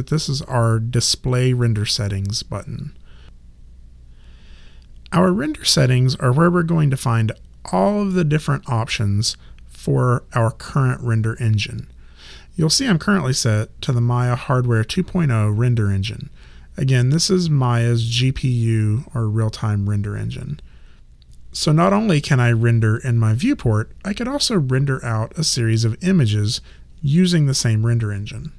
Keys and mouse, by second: 1.5 click.